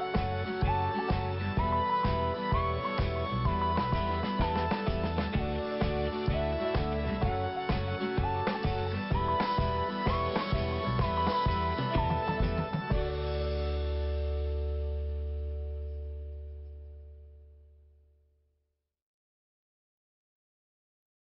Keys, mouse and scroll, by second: 0.1 click, 2.2 click, 2.8 click, 3.5 click, 4.9 click, 6.1 click, 6.8 click, 8.0 click, 9.6 click, 11.3 click, 13.0 click, 14.0 click, 15.1 scroll down 1, 17.3-17.6 scroll up 1, 19.3-19.7 scroll down 1, 19.7-20.2 scroll up 1, 20.3 click.